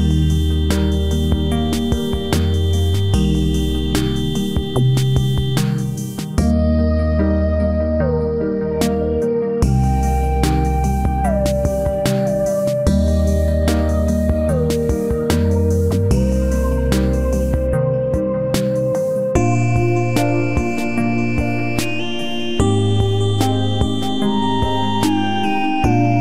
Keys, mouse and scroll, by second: 5.1 ctrl+click, 7.1 ctrl+z, 7.9 ctrl+z, 9.1 space, 15.6 space.